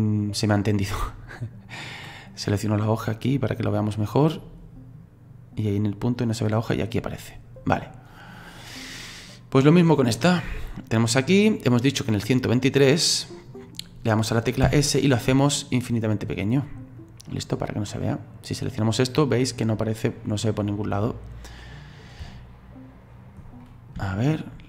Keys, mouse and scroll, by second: 2.6 right click, 3.9-7.1 drag, 11.1 right click, 12.2-14.6 drag, 14.6 s, 17.0-18.1 drag, 18.1 right click, 18.8 right click, 20.9-22.2 drag, 22.2 space, 23.1-23.6 scroll down 7, 23.6-24.6 middle drag.